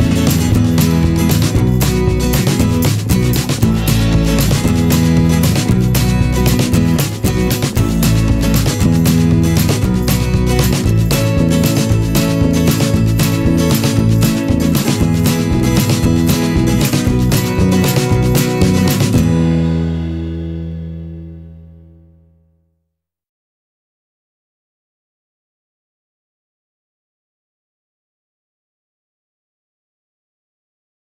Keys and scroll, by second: 2.4 ctrl+z, 2.6 ctrl+z, 2.6 ctrl+z, 2.8 ctrl+z, 3.7 ctrl+z, 7.0 alt+v, 7.9 ctrl+z, 8.1 ctrl+z, 12.0 p, 17.7 ctrl+z, 23.2 v, 25.6 ctrl+z, 27.0 Delete, 27.3 p.